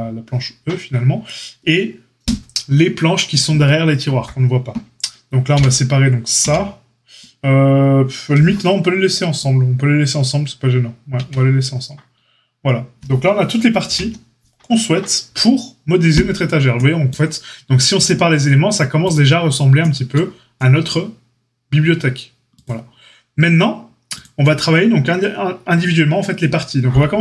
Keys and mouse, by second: 11.1 Tab, 13.8 alt+h, 17.9 click.